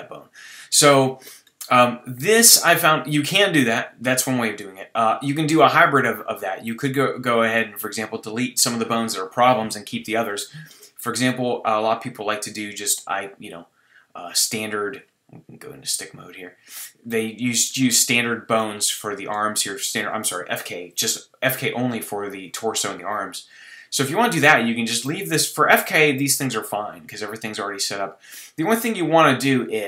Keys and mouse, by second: 6.2 click, 6.8-10.6 middle drag, 10.7 middle click, 11.2 middle click, 15.8 click, 16.3 middle click, 16.4 click, 17.1 middle click, 17.8 click, 18.1 middle click, 24.0 middle click, 24.3 middle click, 25.3 middle click, 26.3 middle click.